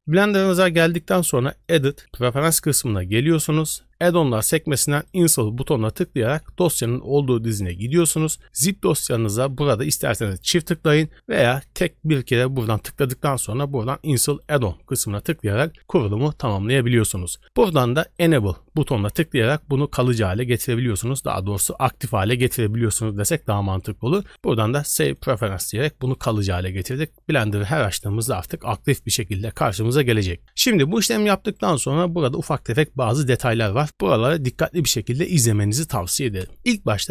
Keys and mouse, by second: 1.7-2.5 drag.